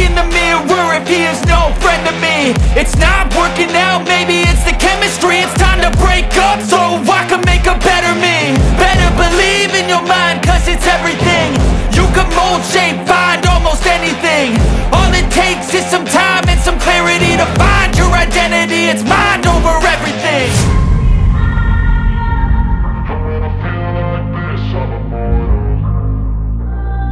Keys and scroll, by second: 4.7 space, 5.1 F2, 12.5 space, 20.7 space, 22.0 Delete, 25.7 F2.